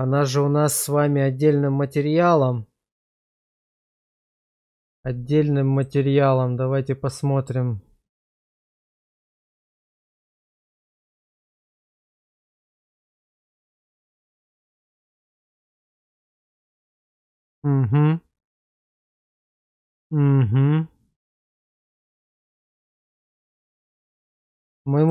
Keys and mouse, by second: 5.7-7.4 drag, 8.4-9.1 middle drag, 9.3 shift+middle drag, 12.0-25.1 middle drag.